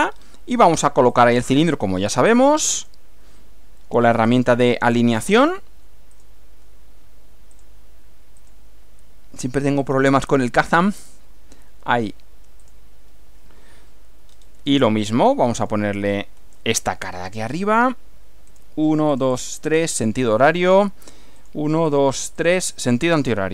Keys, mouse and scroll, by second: 0.3 scroll up 2, 1.1 click, 2.8 ctrl+click, 4.3 click, 6.1 click, 7.5 click, 8.4 click, 9.9 click, 10.6 click, 12.6 click, 14.3-14.6 scroll up 1, 15.1 middle click, 16.1 shift+middle click, 17.1 middle click, 18.5 click, 19.1 click, 19.7 click, 21.3 click, 21.9 click, 22.4 click, 23.3 right click.